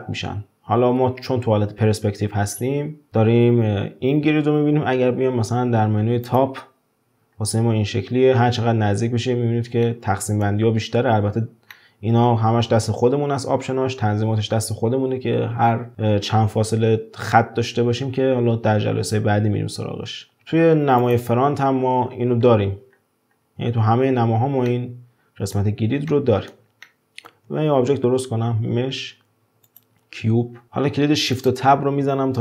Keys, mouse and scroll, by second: 1.0-1.8 scroll down 1, 1.8-3.1 scroll down 1, 4.9 `, 7.3-8.7 scroll up 5, 8.7-9.1 scroll up 6, 9.8-10.7 shift+middle drag, 10.7 scroll down 4, 11.2-11.7 scroll up 5, 11.7-14.7 shift+middle drag, 20.4 `, 22.0-22.4 scroll down 10, 22.9-24.2 scroll up 7, 24.2 scroll down 4, 24.6-27.8 middle drag, 27.8 shift+a, 30.5 scroll down 1, 30.6-31.3 scroll up 1, 31.3 click.